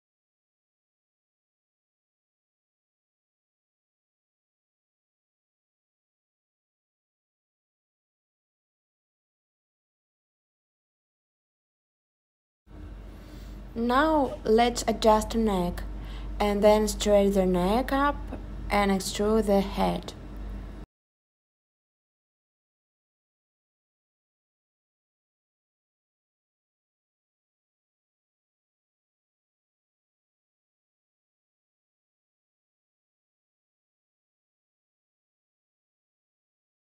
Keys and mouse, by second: 3.1 click, 9.7 click, 11.5 alt+shift+click, 12.5 s, 13.3 click, 13.6 super+z, 14.5 e, 16.3 click, 23.1 s, 23.5 z, 23.7 0, 25.1 click, 25.8 click, 27.4-27.9 drag, 28.1 click, 35.6 middle click, 35.8 middle click, 36.4 middle click.